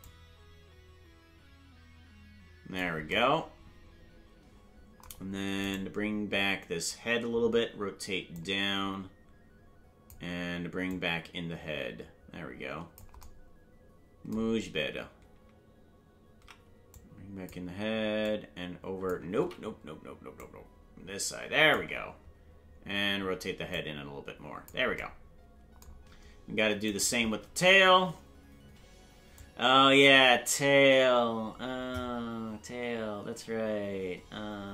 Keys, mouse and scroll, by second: 0.0-2.8 drag, 6.0-8.3 right drag, 8.3-10.1 drag, 10.9-13.0 drag, 16.9 click, 18.2 click, 20.0 ctrl+z, 20.4-21.8 drag, 23.7 click, 27.1-28.8 right drag, 29.3-34.7 drag.